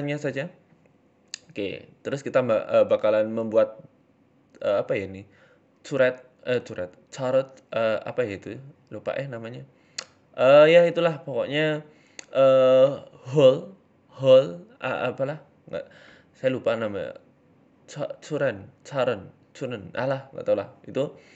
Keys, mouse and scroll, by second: 0.3 click, 0.7 middle click, 0.9-1.3 scroll down 2, 1.3 KP_3, 1.9 ctrl+KP_1, 2.5 KP_1, 2.9-3.3 scroll up 3, 3.1 shift+middle click, 3.3-3.8 scroll down 1, 3.8 scroll up 1, 3.8 e, 4.1 s, 6.8 e, 8.2 click, 8.7 g, 9.9 scroll down 3, 10.0 middle click, 10.9 middle click, 11.5 KP_3, 12.2 KP_1, 12.7-13.2 scroll down 3, 13.5 Tab, 13.7 s, 15.0 click, 15.6 Tab, 16.3 Tab, 16.6 right click, 16.7 Tab, 17.1 right click, 17.2 Tab, 17.5 click, 18.0 s, 20.2 KP_1.